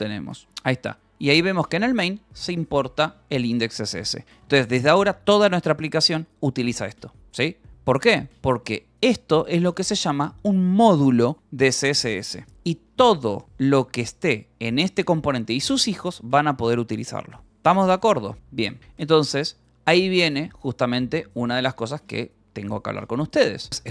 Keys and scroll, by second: 0.0-0.5 typing, 1.5 k, 2.6 Escape, 4.8 shift+v, 6.1 Escape, 9.1 shift+v, 12.3 shift+v, 13.5 shift+v, 16.1 Escape, 17.4-20.1 typing, 20.4 Return, 21.1-23.3 typing.